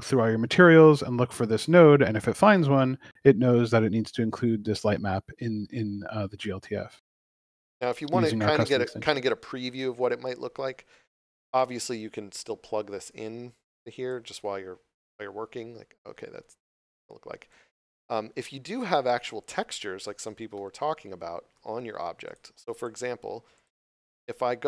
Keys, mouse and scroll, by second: 0.0 click, 0.6 shift+middle click, 1.2 scroll up 1, 3.5 scroll down 1, 4.6 shift+middle click, 7.8 scroll up 1, 13.1 click, 17.5 click, 18.7 scroll down 1, 20.5 shift+middle click, 21.5 q, 22.2 click.